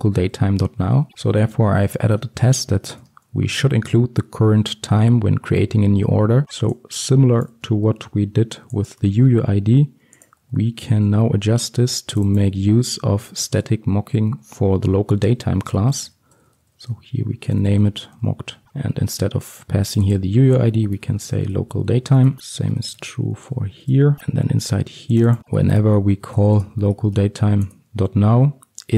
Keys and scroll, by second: 8.0 ctrl+c, 9.2 ctrl+v, 10.5 ctrl+x, 22.4 Return, 24.2 ctrl+v, 26.7 Return.